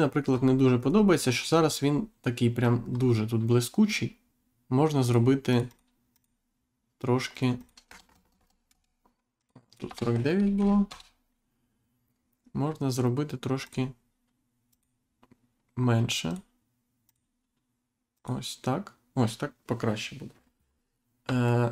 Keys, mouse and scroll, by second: 0.0-0.7 scroll up 1, 1.3-1.8 scroll up 1, 1.9-2.3 scroll down 1, 2.5-2.9 scroll down 1, 2.9 scroll up 1, 5.0 click, 6.1 click, 7.3 click, 8.7 Return, 9.4 click, 9.8 BackSpace, 10.8 Return, 13.6 click, 14.7 click, 16.3 click, 17.0 click, 18.1 click, 20.3-20.7 scroll down 1, 21.4 shift+middle click.